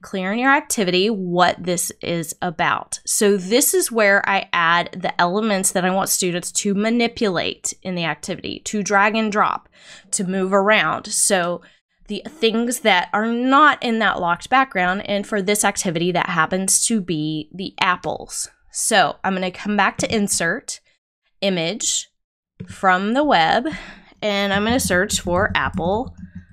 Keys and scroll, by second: 24.2-25.1 typing.